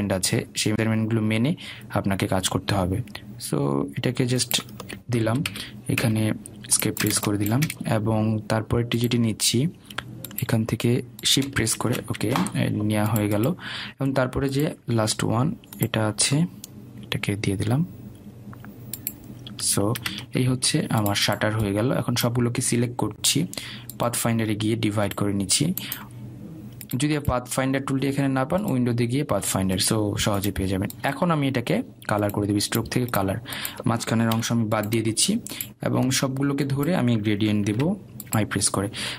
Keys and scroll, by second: 7.3 Escape, 14.1 Escape, 21.9 Escape, 36.7 Delete.